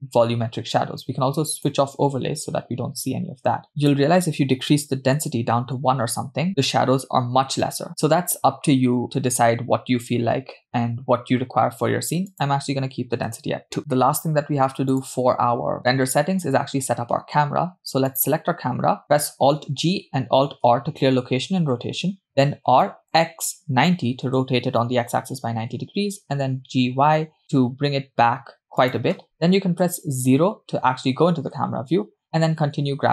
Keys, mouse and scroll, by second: 1.6 click, 3.8-6.5 drag, 12.3-13.8 drag, 13.8-14.4 scroll up 6, 15.1 click, 17.0-18.3 scroll down 2, 18.3 drag, 19.9 alt+g, 20.9 alt+r, 22.9 r, 25.4 g, 29.8 KP_0, 32.2 g.